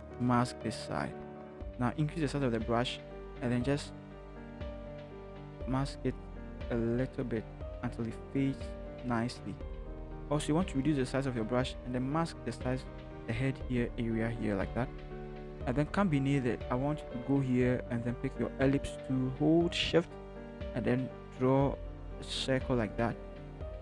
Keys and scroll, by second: 1.8-3.0 typing, 10.6 [, 10.9 [, 11.0 [, 11.3 [.